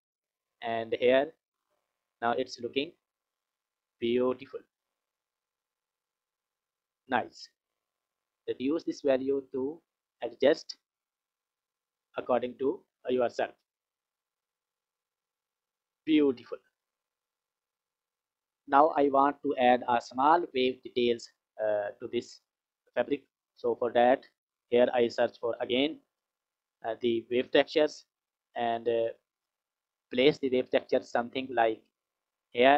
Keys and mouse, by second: 5.4 click, 8.2-12.4 drag, 13.7 click, 14.8 click, 18.1 F6, 19.5 click, 21.8 click, 23.7 click, 24.3 click, 24.9 click, 26.3 shift+a.